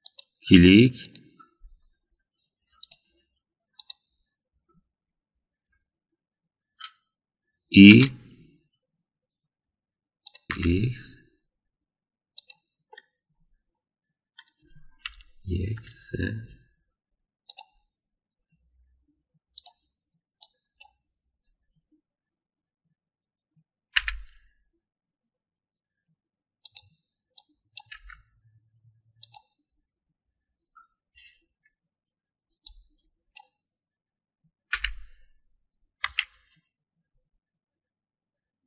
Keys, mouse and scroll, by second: 2.0 click, 3.8 click, 4.8 click, 8.8 e, 10.8 g, 13.9-15.4 middle drag, 16.0 KP_1, 16.7 KP_3, 18.4 click, 20.6 click, 21.4 click, 24.9 g, 28.4 click, 33.6-34.4 drag, 35.7 g.